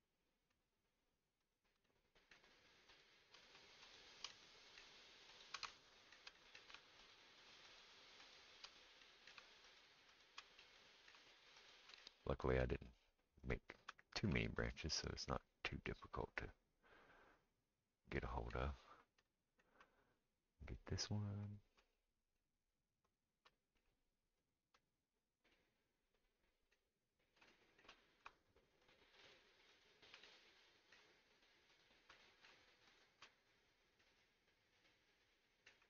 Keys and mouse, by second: 1.4 shift+click, 1.5-2.9 shift+middle drag, 2.9 shift+click, 3.0 shift+middle click, 3.9 shift+click, 3.9-5.3 shift+middle drag, 5.3 shift+click, 5.4-7.1 shift+middle drag, 7.1 shift+click, 7.8-9.6 shift+middle drag, 9.6 shift+click, 9.8 shift+middle click, 10.1 shift+click, 10.2-11.6 shift+middle drag, 11.6 shift+click, 11.7-13.5 shift+middle drag, 13.5 shift+click, 13.5-20.6 shift+middle drag, 20.6 shift+click, 20.8 shift+middle click, 21.5 shift+click, 21.6-29.8 shift+middle drag, 23.1 shift+click, 28.8 shift+click, 29.8 shift+click, 29.8-35.8 shift+middle drag, 32.9 shift+click.